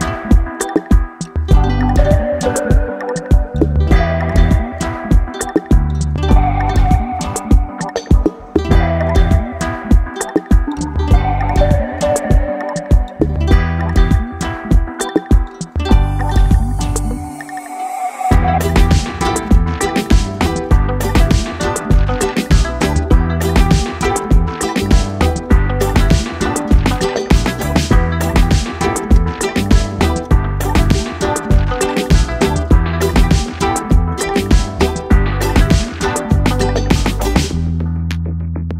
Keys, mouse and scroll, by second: 1.0 click, 3.3 click, 6.5-8.3 typing, 11.5 BackSpace, 12.4-20.1 drag, 14.6-16.2 click, 15.6 click, 20.1-20.8 ctrl+space, 20.4 ctrl+space, 21.9-22.6 click, 22.7 space, 23.3-23.8 drag, 26.3 ctrl+space, 26.5-27.0 ctrl+click, 26.8 ctrl+space, 27.1-27.6 click, 27.4 space, 27.9 click, 28.1 space, 28.5 space, 28.9-29.8 click, 29.8 space, 30.0 click, 30.1 space, 30.6-31.6 drag.